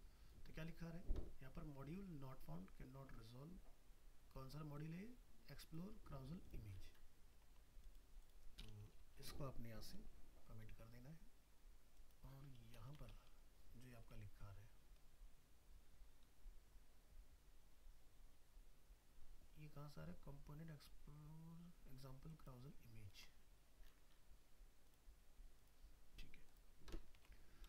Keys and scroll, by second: 23.2 alt+Tab, 27.2 alt+Tab.